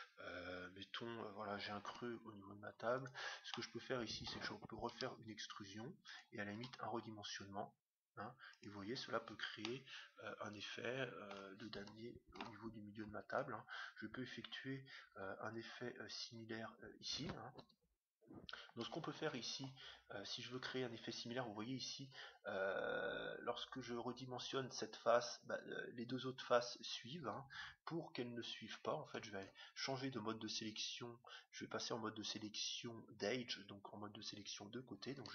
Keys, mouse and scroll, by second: 1.9 Tab, 2.2-3.4 middle drag, 3.1-4.6 right drag, 3.4 click, 4.8 e, 5.0 middle click, 6.0 e, 6.5 s, 9.6-11.4 middle drag, 11.8 Tab, 12.3 Tab, 13.2-15.2 right drag, 15.2 s, 20.5 s.